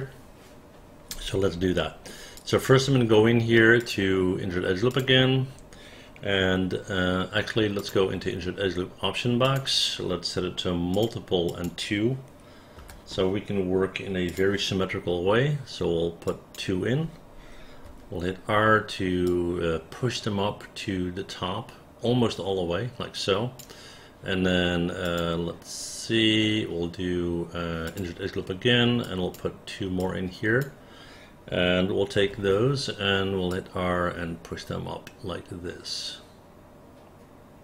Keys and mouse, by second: 1.9 alt+middle click, 2.5 alt+click, 11.0 click, 11.6 click, 12.9 2, 16.3 click, 17.9 r, 29.1 click, 30.1 click, 32.4 r.